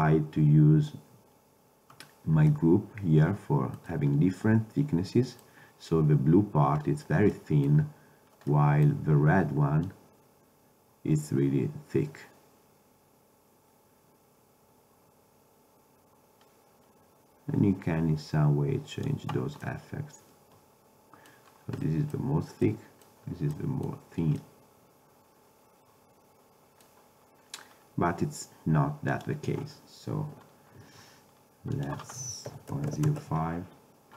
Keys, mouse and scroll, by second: 0.7 middle click, 2.7-3.2 middle drag, 10.0-11.8 drag, 21.5 scroll up 1, 22.8 middle drag, 22.9 middle click, 29.2-31.1 drag, 31.1-31.9 middle drag, 31.9-33.8 drag.